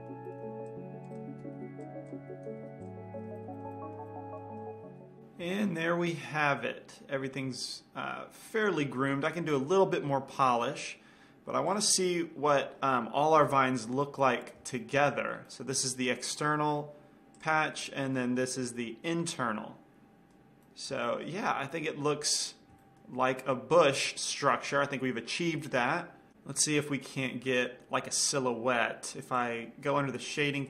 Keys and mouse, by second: 0.7 c, 1.4 right click, 1.6 ctrl+l, 1.8 x, 2.4 click, 2.7 ctrl+l, 2.8 x, 3.4 Tab, 3.5-5.0 middle drag, 6.2-11.0 middle drag, 12.3-13.9 drag, 13.9 KP_5, 14.9-17.9 middle drag, 15.3 a, 17.9-19.8 drag, 18.3-20.8 middle drag, 23.6-25.6 middle drag, 27.3-29.0 middle drag, 29.8-30.6 drag.